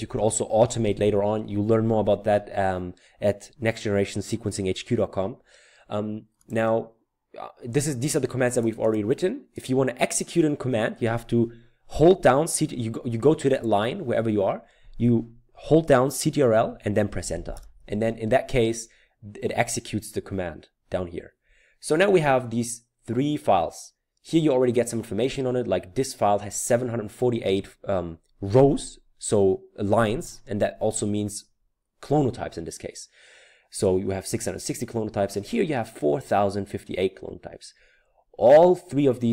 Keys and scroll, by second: 0.1 Return, 17.6 ctrl+Return.